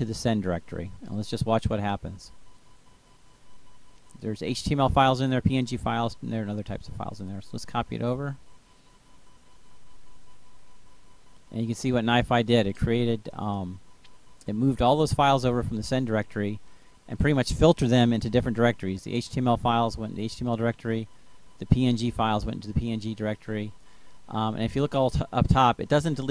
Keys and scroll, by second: 7.0 ctrl+v.